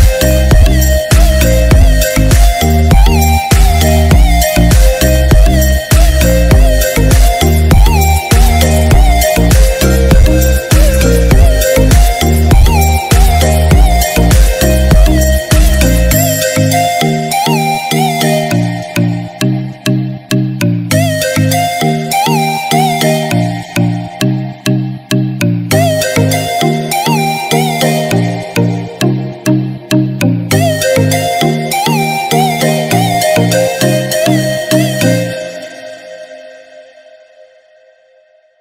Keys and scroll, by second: 3.8 ctrl+-.